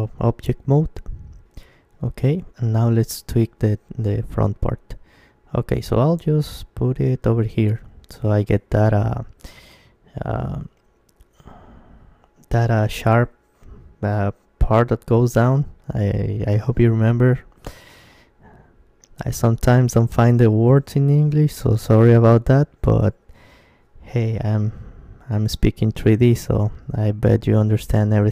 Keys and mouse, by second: 0.1 Tab, 1.6 KP_3, 2.8 g, 6.2-9.9 drag, 9.9-14.3 middle drag, 14.3 KP_3, 16.3-25.1 middle drag, 24.7 Tab, 25.9-27.0 middle drag, 27.0-28.3 right drag.